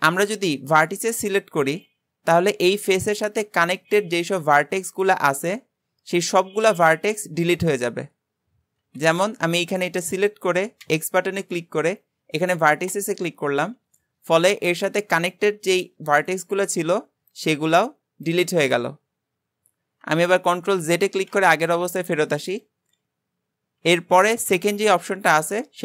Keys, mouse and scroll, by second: 0.5 shift+middle click, 1.0 scroll up 1, 21.1 ctrl+z, 23.8 x.